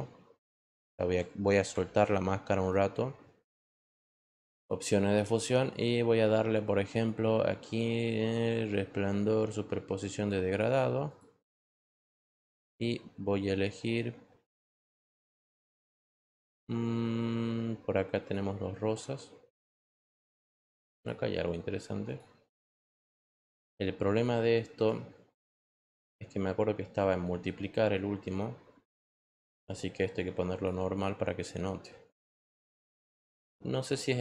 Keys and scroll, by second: 0.6 ctrl+z, 0.6 ctrl+x, 1.9 ctrl+z.